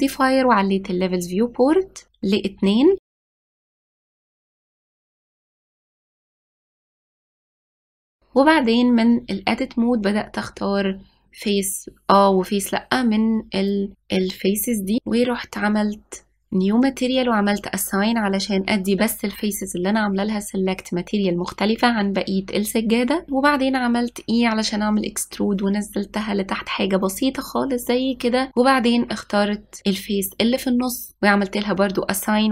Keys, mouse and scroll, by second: 2.3-3.3 drag, 3.9-5.5 drag, 7.6 click, 8.2 click, 8.6 shift+click, 8.8 shift+click, 9.0 shift+click, 9.6 shift+click, 9.8 shift+click, 10.4 shift+click, 10.6 shift+click, 10.8 shift+click, 11.8-17.5 drag, 20.2 click, 24.1 e, 28.6 click, 29.7-32.5 drag.